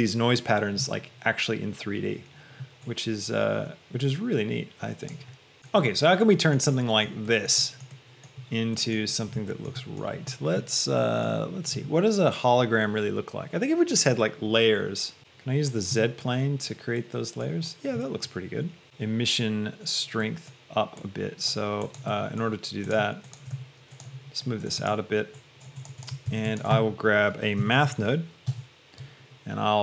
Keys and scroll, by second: 23.9 shift+g, 26.6 a, 27.9 t, 28.7 Return.